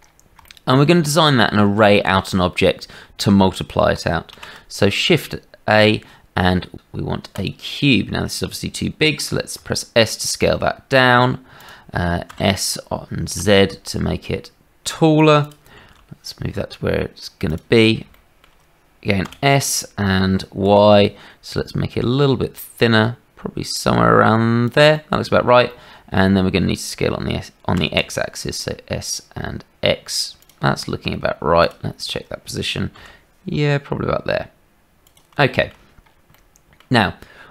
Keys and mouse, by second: 0.5 shift+middle click, 4.3 shift+a, 9.5 s, 12.2 s, 15.8 g, 18.1 shift+click, 19.2 s, 24.9 middle click, 25.7 shift+middle click, 27.7 s, 32.9 g, 35.4 shift+click, 36.3 click.